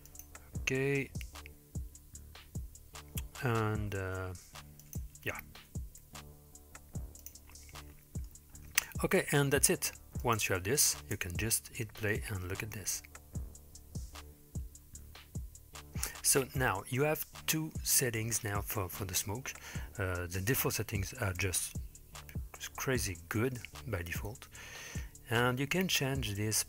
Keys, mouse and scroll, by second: 3.9 s, 5.6 g, 7.5-8.3 middle drag, 8.6-10.3 scroll down 2, 10.3 click, 11.3 space, 14.1-14.7 scroll up 3.